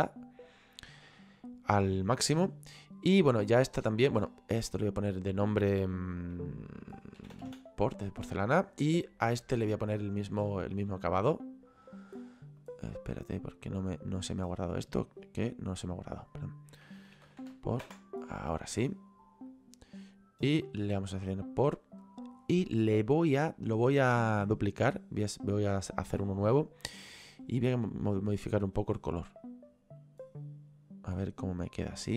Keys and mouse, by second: 3.3 right click, 5.2 click, 7.4 o, 9.0 right click, 10.4 click, 12.3 click, 14.5 right click, 16.1 click, 17.3 o, 17.9 Return, 17.9 KP_Enter, 19.6 right click, 24.7 click, 27.3 click.